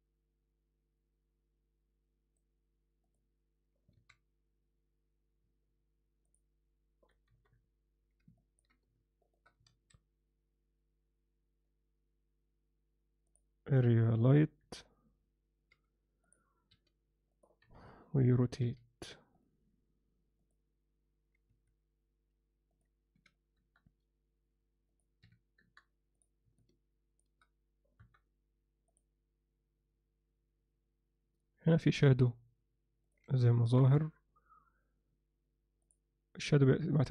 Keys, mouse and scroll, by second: 4.0 alt+a, 7.1 KP_0, 7.3 KP_7, 8.4 ctrl+alt+middle drag, 14.6 KP_1, 15.7 g, 16.7 r, 17.6 KP_7, 18.6 r, 20.4-21.6 drag, 22.7-23.8 drag, 24.9 click, 28.0 KP_0, 33.1-34.6 drag, 35.8 click.